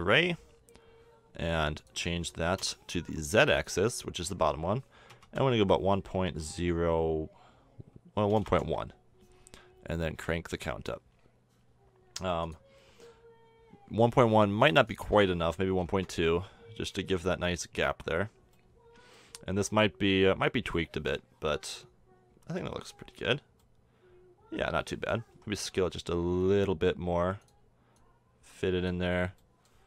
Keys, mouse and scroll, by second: 0.4-1.8 middle drag, 2.6-5.4 drag, 10.2-12.0 drag, 12.0-14.3 middle drag, 14.6-16.7 drag, 16.7 middle click, 19.8-20.7 drag, 20.8-21.1 middle drag, 23.1 KP_5, 26.3 s, 27.6-29.2 middle drag, 29.2-29.5 drag.